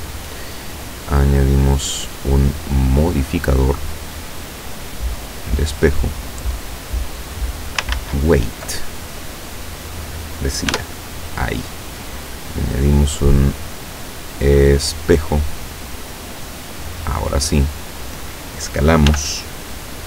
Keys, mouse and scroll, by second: 3.1 click, 5.3 click, 6.5-7.9 drag, 8.0 ctrl+z, 9.4 click, 10.7 Tab, 12.2 click, 15.0 click, 15.9-18.3 drag, 19.1 s.